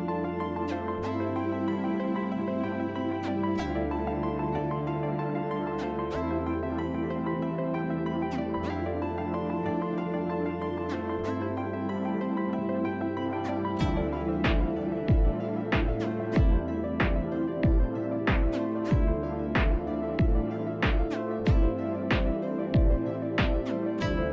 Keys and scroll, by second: 0.1 shift+s, 9.9-12.3 typing, 17.8 shift+s, 18.6 shift+s, 19.0 shift+s.